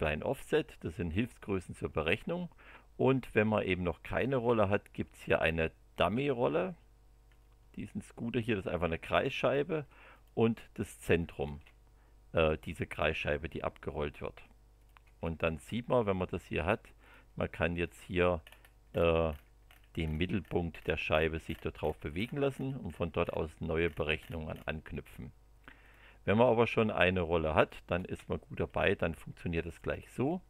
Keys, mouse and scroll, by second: 3.9 click, 4.2 space, 5.2 click, 7.3-9.4 middle drag, 10.1 click, 11.2 click, 11.4 space, 14.7 click, 15.0 space, 17.0 click, 17.8 click, 18.4-20.6 scroll up 6, 20.6 scroll down 1, 20.7 scroll up 1, 21.0 scroll down 1, 21.1 scroll up 1, 21.3 scroll down 1, 21.4 scroll up 1, 21.7 scroll down 1, 21.8 scroll up 1, 22.0 scroll down 1, 22.1 scroll up 1, 22.4 scroll down 1, 22.5 scroll up 1, 22.7 scroll down 1, 22.8-23.5 scroll up 4, 25.8 click, 27.6 click, 27.9 space, 28.8-29.9 middle drag, 30.2 middle click.